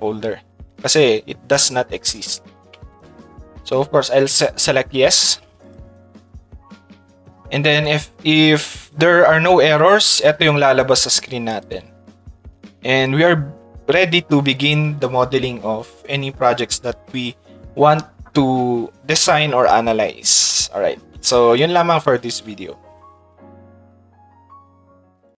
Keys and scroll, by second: 7.3 Tab, 11.7 Tab.